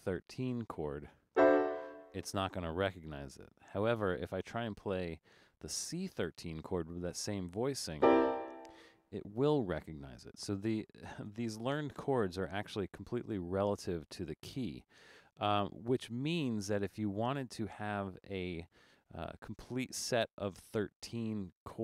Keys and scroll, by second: 11.4 BackSpace.